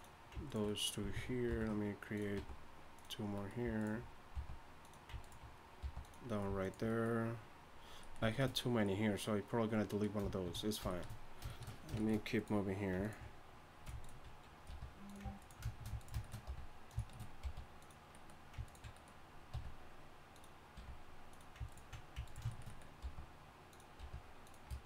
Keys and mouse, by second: 1.5 ctrl+b, 2.4 g, 3.8 click, 4.3 g, 5.8 g, 14.7 r, 16.5 r, 17.4 g, 19.5 r, 20.7 g, 23.0 g, 24.0 r.